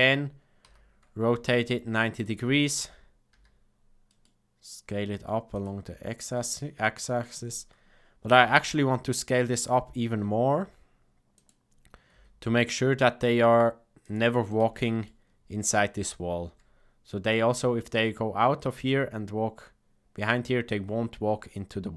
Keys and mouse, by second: 0.6 r, 3.2 s, 6.9 shift+middle click, 8.2 s, 12.1 g, 14.4 middle click, 16.4 Tab, 21.5-21.9 middle drag.